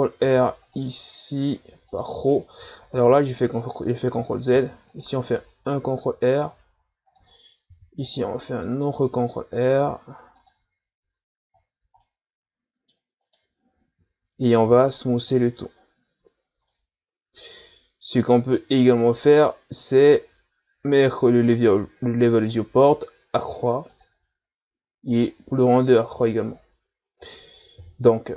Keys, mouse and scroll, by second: 0.2 ctrl+r, 3.0 ctrl+z, 4.5 ctrl+r, 7.7 ctrl+r, 10.6 Tab, 11.0 a, 12.0-13.2 middle drag, 13.2 right click, 14.7 w, 16.1 a, 16.5 scroll down 2, 16.7-22.4 middle drag, 22.4 right click, 23.9-25.9 drag, 25.9 a, 27.8 KP_1.